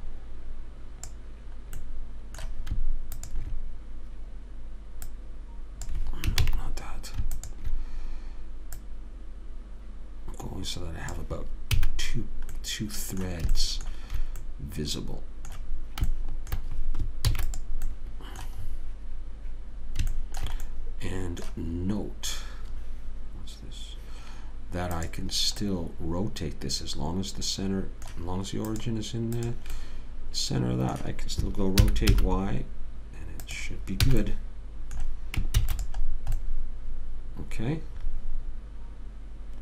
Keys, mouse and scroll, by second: 2.1-3.5 middle drag, 3.5 click, 6.8 ctrl+z, 9.2 click, 12.1 a, 12.9-15.1 middle drag, 17.6 ctrl+s, 20.5 middle click, 21.1-23.8 middle drag, 25.4 click, 26.0-28.1 middle drag, 26.0-27.1 right drag, 29.0 click, 32.2 r, 34.5 a, 34.6 middle click, 35.9 ctrl+s.